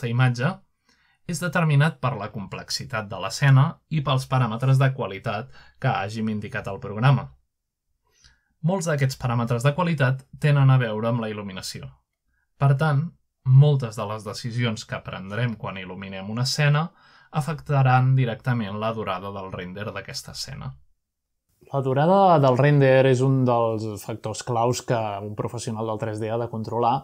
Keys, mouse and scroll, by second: 3.1 click, 4.8-6.0 middle drag, 6.8-8.6 drag, 9.8 click, 10.8-21.3 drag, 21.8-22.8 middle drag, 24.4 shift+a, 26.4 click.